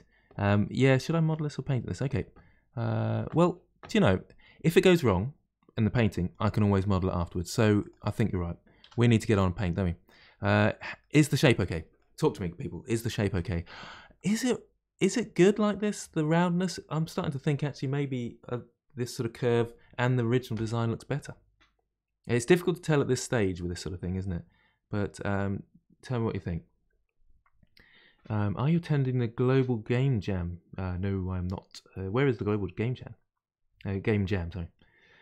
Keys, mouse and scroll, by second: 4.2-7.3 scroll down 2, 7.8 click, 8.8 Delete, 9.6-10.3 middle drag, 10.3-10.7 scroll down 1, 10.7 middle click, 11.1-11.5 scroll down 1, 11.5-17.1 middle drag, 21.1-24.1 middle drag.